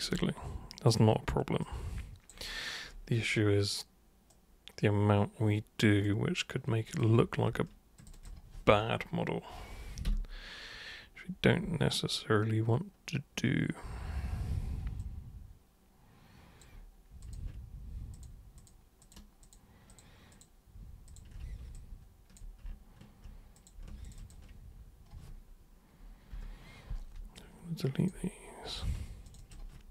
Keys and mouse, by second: 0.2 alt+super+click, 1.6 alt+super+click, 4.3-6.0 super+right drag, 6.9 super+click, 8.0 ctrl+shift+super+click, 8.1 ctrl+shift+super+click, 15.0-16.7 alt+super+drag, 17.2 super+click, 18.2 ctrl+shift+super+click, 18.6 ctrl+shift+super+click, 19.0 ctrl+shift+super+click, 19.4 ctrl+shift+super+click, 19.9 ctrl+shift+super+click, 20.3 ctrl+shift+super+click, 21.1 ctrl+shift+super+click, 21.7-22.4 alt+super+drag, 23.6 super+click, 24.0 ctrl+shift+super+click, 27.4-28.1 alt+super+drag, 28.7 super+click, 29.3 ctrl+shift+super+click.